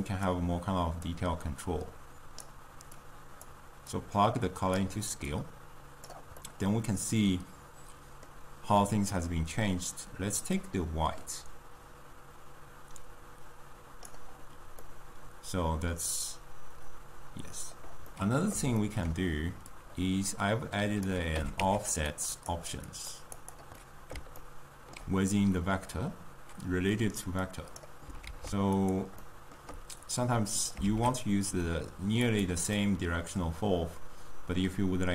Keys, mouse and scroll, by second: 2.6 click, 4.9-6.4 drag, 6.4-10.8 middle drag, 10.8-13.7 drag, 14.7-17.8 middle drag, 27.9 click, 28.2 ctrl+a, 30.8 shift+d.